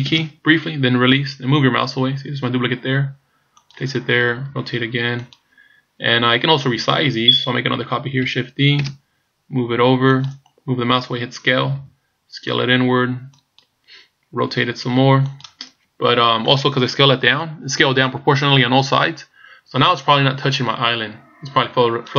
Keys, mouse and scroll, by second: 0.1 shift+d, 4.5 r, 8.9 shift+d, 11.8 s, 14.5 r.